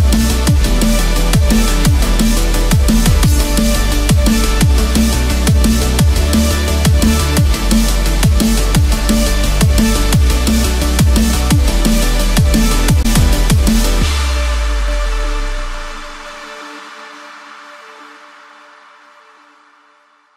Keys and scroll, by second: 7.4 Return, 8.8 ctrl+z, 19.9 Return.